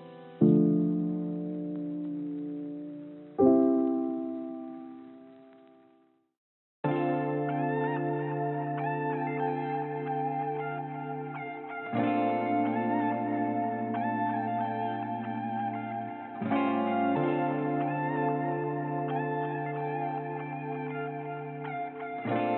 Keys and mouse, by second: 7.7 l, 8.7 g, 10.0 shift+d, 11.9 shift+d, 13.9 ctrl+z, 14.3 ctrl+z, 14.5 ctrl+z, 14.9 click, 15.6 j, 16.3 l, 16.7 click, 16.9 l, 17.6 shift+d, 21.3 click, 21.8 g.